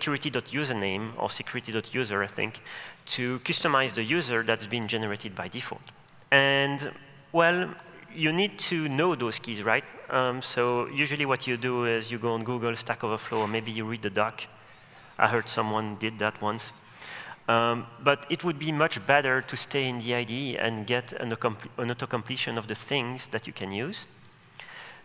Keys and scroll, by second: 8.0 Return.